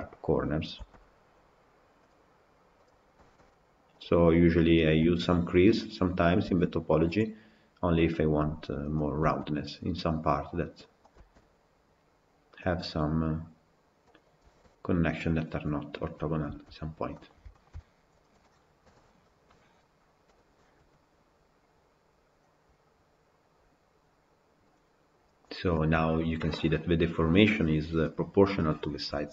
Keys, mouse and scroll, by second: 0.0 click, 0.8 g, 2.8 click, 3.2 g, 4.8 click, 5.1 g, 6.3 click, 6.5 g, 9.0 click, 9.3 g, 14.1 click, 14.6 g, 16.5 Tab, 16.8 scroll down 4, 17.0-17.7 middle drag, 17.7-18.1 scroll up 3, 18.1 click, 18.7 KP_Decimal, 19.4-24.7 middle drag, 25.6-28.6 middle drag, 28.7-29.3 middle drag.